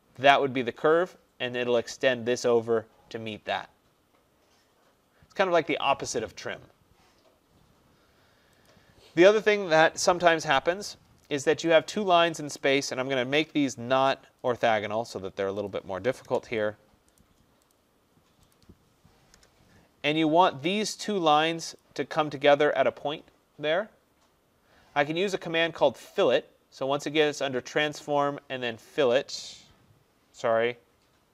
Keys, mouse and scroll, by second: 0.4 click, 8.7 click, 10.4 Escape, 11.8 click, 12.7 click, 14.5 click, 16.3 Return, 17.2 right click, 17.8 click, 18.6 click, 19.4 Return, 20.9 click, 21.8 click, 27.3 click.